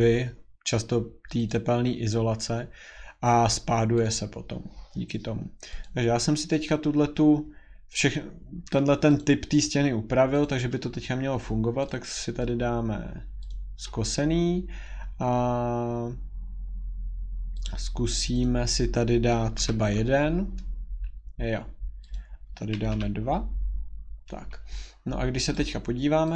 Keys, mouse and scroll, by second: 1.5 click, 4.0 click, 5.8 click, 8.1-8.4 scroll, 9.2 click, 9.6 middle click, 9.7 scroll, 10.4 click, 11.9 click, 13.5 click, 17.6 click, 18.4 click, 22.1 click, 22.1 1, 24.2 middle click, 24.2 2, 24.2 scroll, 25.5 click.